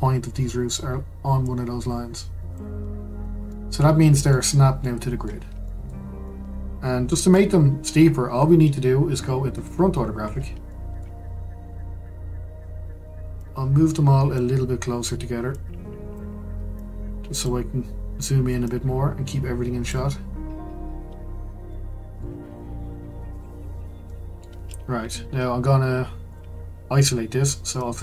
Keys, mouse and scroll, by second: 1.4 click, 2.8-3.5 scroll down 5, 3.5-9.5 middle drag, 9.5 click, 10.1-10.5 scroll up 5, 10.7-11.1 shift+middle drag, 11.1-13.4 scroll down 2, 13.4 drag, 15.5 click, 16.7 click, 18.6 click, 21.1-21.7 scroll up 1, 21.7-23.3 middle drag, 23.3 click, 24.0-26.3 shift+middle drag, 26.3 click, 27.8 click.